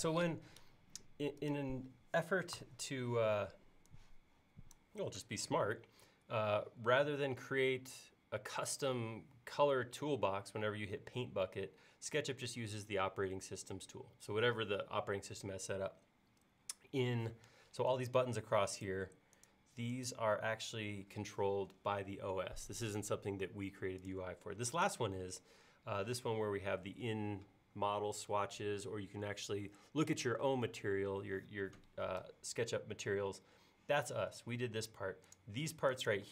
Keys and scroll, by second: 2.6 b.